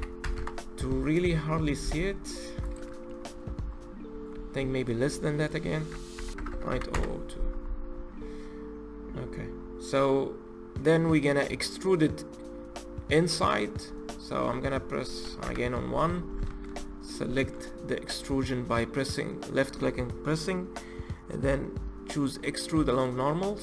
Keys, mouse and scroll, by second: 0.2 KP_Enter, 2.8-3.9 scroll down 16, 3.9-5.2 scroll up 12, 5.2-6.3 drag, 6.3 KP_0, 7.5-8.2 scroll down 12, 8.8-9.8 scroll up 13, 9.8-12.8 middle drag, 13.4-15.2 scroll down 12, 15.2 KP_1, 15.9-16.3 scroll down 1, 16.3 shift+middle click, 16.6-17.2 scroll up 1, 17.2-18.1 shift+middle drag, 18.1 click.